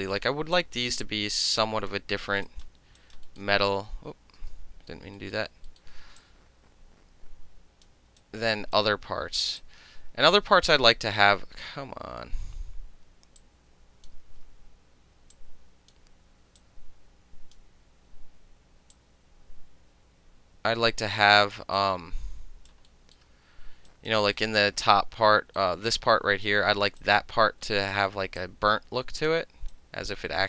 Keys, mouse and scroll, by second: 0.6-1.9 drag, 2.5 alt+click, 3.0 alt+click, 3.6 space, 4.4 space, 5.2 alt+middle drag, 5.7 alt+middle click, 6.2-7.9 drag, 8.2 alt+right click, 9.6-11.1 alt+drag, 13.4-14.1 drag, 14.2 ctrl+z, 15.3-15.9 drag, 16.6-17.6 drag, 18.9-21.6 drag, 21.8 alt+click, 22.9 alt+middle click, 23.9 alt+click, 24.4-25.4 alt+middle drag, 25.6-27.0 alt+middle drag, 27.0 alt+right click, 27.2-27.8 alt+middle drag, 27.9-28.4 alt+middle drag, 28.4 alt+right click, 29.3 alt+middle click, 29.7 alt+right click, 30.1 alt+middle click.